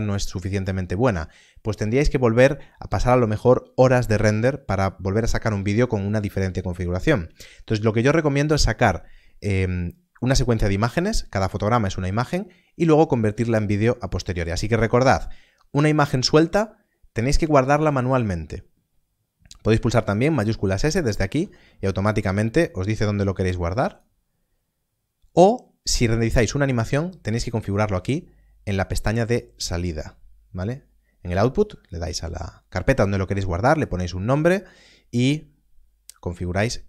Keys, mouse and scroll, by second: 17.8 click, 21.3 shift+s, 23.6 click.